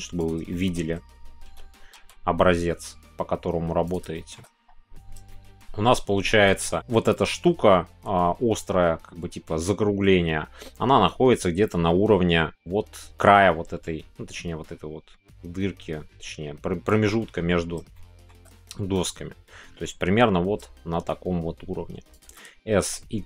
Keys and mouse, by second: 0.5 shift+middle click, 4.1 middle click, 5.3-17.8 shift+middle drag, 17.9-18.3 shift+middle drag, 22.5 s, 22.8 x.